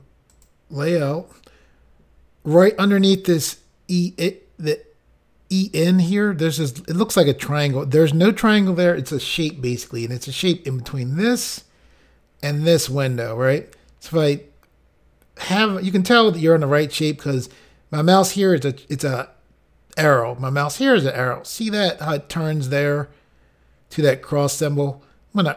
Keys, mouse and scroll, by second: 0.3 click, 0.4 click.